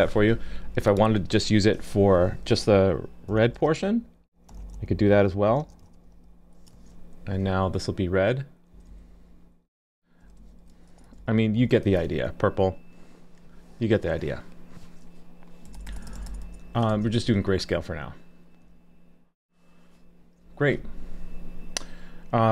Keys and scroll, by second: 6.7 super+s, 11.8 super+s, 16.9 super+s.